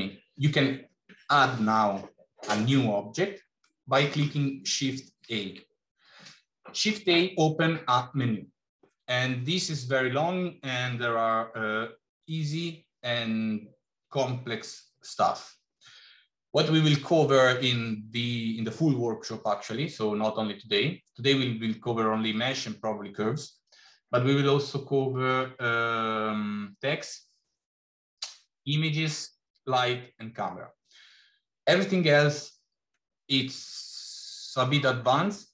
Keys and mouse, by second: 3.6 middle click, 5.1 shift+a.